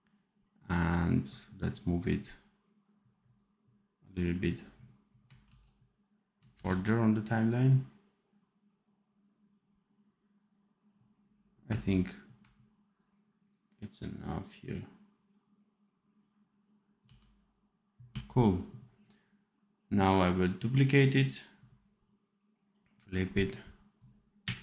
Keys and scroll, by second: 5.4 ctrl+c, 6.4 ctrl+v, 16.9 d.